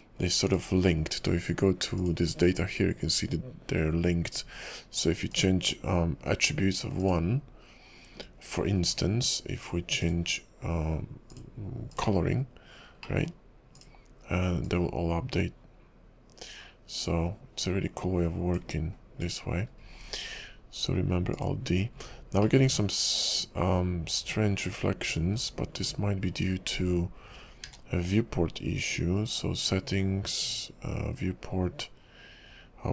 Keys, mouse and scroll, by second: 2.0 click, 5.4 click, 7.1 click, 8.8-10.0 scroll down 9, 19.2 click, 19.7-21.4 scroll up 8, 21.4 click, 22.1-22.7 scroll up 2, 22.7 middle click, 25.6 KP_5, 26.1-27.0 scroll down 3, 27.7 q.